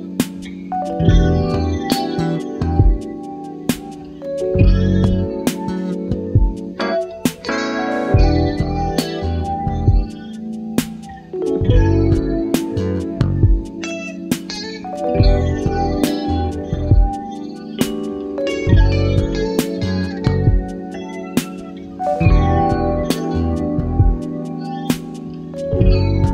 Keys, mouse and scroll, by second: 1.0 ctrl+d, 2.2-3.9 ctrl+drag, 5.5 click, 8.2 click, 11.1-12.3 ctrl+shift+drag, 12.5-15.5 ctrl+shift+drag, 15.6-16.0 ctrl+scroll up 3, 16.8 ctrl+d, 17.5 click, 19.3 click, 20.7 ctrl+z, 22.9-25.5 drag.